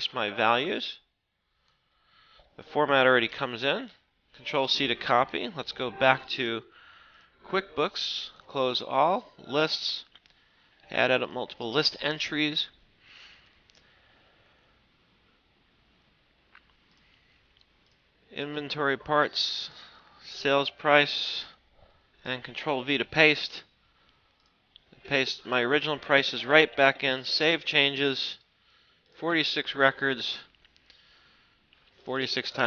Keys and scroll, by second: 2.9 ctrl+c, 4.6 alt+Tab, 5.4 alt+Right, 21.8 ctrl+v.